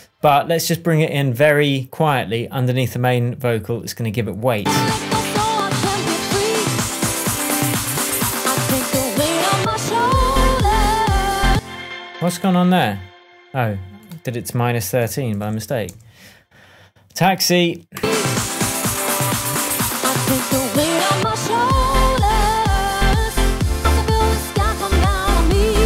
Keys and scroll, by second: 11.4 space, 14.7-15.9 typing, 22.3 shift+Tab.